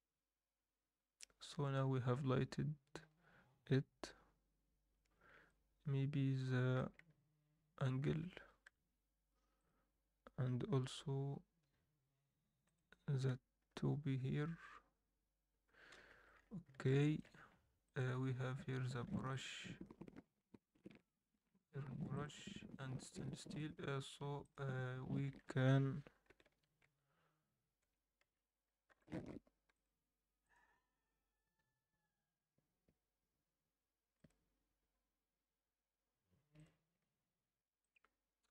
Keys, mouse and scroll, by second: 1.8 KP_0, 5.4-6.7 alt+middle drag, 8.0 alt+a, 8.6 KP_7, 9.5-10.4 drag, 10.4 scroll down 1, 10.7 r, 13.7 KP_0, 15.5 KP_0, 16.1 alt+a, 16.3-16.7 scroll up 4, 16.9 alt+shift+middle drag, 17.3 scroll up 1, 17.8 click, 18.9 scroll up 1, 19.3-19.7 alt+shift+middle drag, 21.2 scroll up 1, 22.1 click, 24.9 Tab, 25.3 a, 26.4 shift+n, 26.9 Tab, 27.8 Tab, 28.2 a, 28.9 u, 31.5 Tab, 34.1 click.